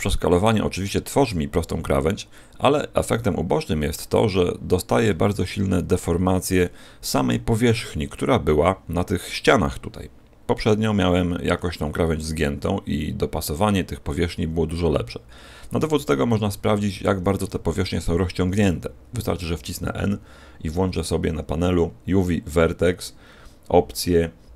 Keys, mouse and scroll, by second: 5.0-5.9 scroll up 2, 5.9 middle click, 5.9-6.9 scroll up 4.